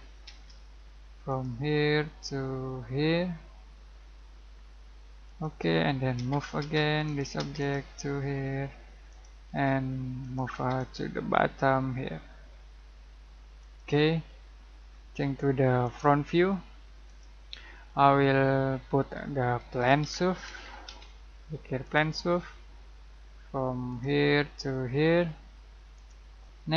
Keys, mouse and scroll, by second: 0.2 space, 1.2 click, 5.2 click, 6.1 m, 6.6 space, 7.0 click, 7.3 space, 7.5 click, 9.5 space, 10.2 click, 10.5 space, 10.7 click, 13.6 click, 14.2-15.8 middle drag, 15.8 click, 17.8-18.2 scroll down 1, 18.2 middle click, 18.7-19.7 scroll up 1, 19.5-21.3 typing, 21.8 click, 22.4-23.8 scroll down 1, 23.8 click.